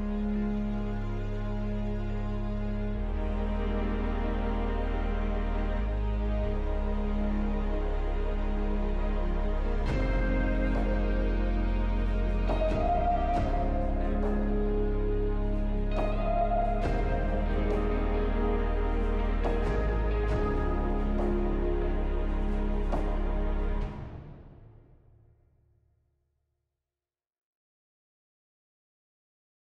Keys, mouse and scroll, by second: 2.7 alt+middle click, 3.7-4.0 alt+scroll up 3, 4.3 alt+middle click, 4.9 ctrl+z, 5.4-5.9 scroll down 3, 6.0 alt+middle click, 13.0 double click, 13.6 alt+middle click, 14.6 e, 16.9 alt+middle click, 24.7 alt+middle click, 26.1 scroll, 26.3-26.6 scroll up 1, 26.9 alt+middle click, 29.1-29.4 scroll down 1.